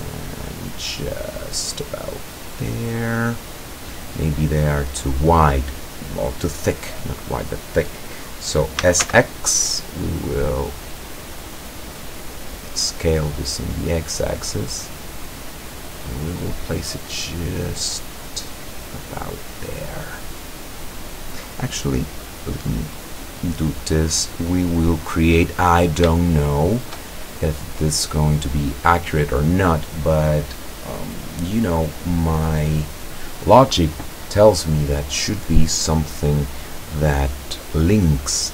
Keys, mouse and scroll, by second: 1.7 click, 2.1-4.0 middle drag, 8.8 s, 9.1 x, 12.8 click, 13.7-19.3 drag, 22.1-24.0 drag, 24.1-25.6 drag, 26.2 shift+click, 27.8-29.2 drag, 30.1-31.2 middle drag.